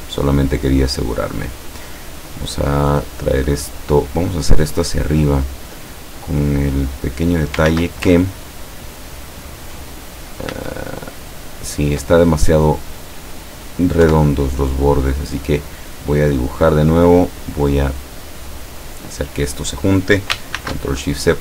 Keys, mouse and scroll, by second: 1.1 click, 6.9 click, 7.7 ctrl+z, 8.4-9.0 ctrl+scroll up 4, 10.2 ctrl+scroll down 2, 10.6 ctrl+z, 11.4-11.7 ctrl+scroll down 2, 12.7 click, 13.1 click, 14.1 Delete, 15.2 click, 16.2 click, 17.8 click, 20.6 ctrl+shift+c.